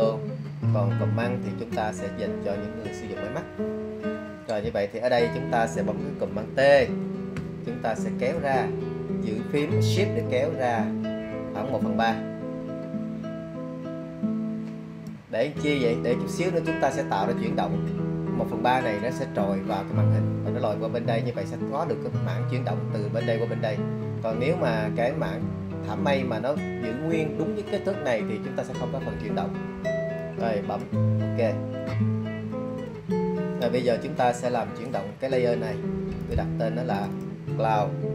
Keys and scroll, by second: 6.9 super+t.